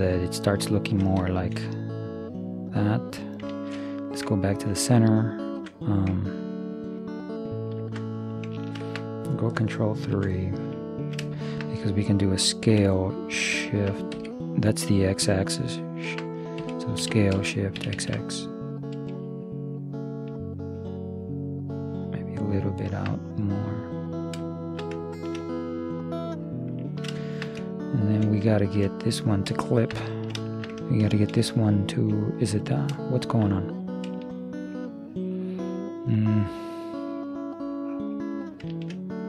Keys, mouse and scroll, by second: 2.4-4.0 middle drag, 7.9 ctrl+,, 8.7 middle click, 10.1 ctrl+KP_3, 12.7 s, 16.7 Escape, 17.1 s, 23.7-29.9 middle drag, 28.0 right click, 31.0-32.6 middle drag, 33.0-34.3 middle drag, 37.1-39.0 drag, 38.8-39.2 middle drag.